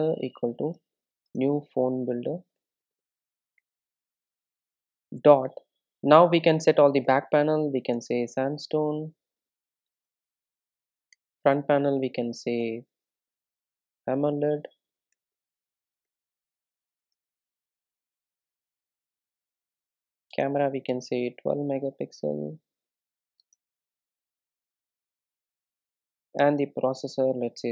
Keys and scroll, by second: 17.5 super+z, 20.4 super+z, 20.6 Return, 26.6 Return.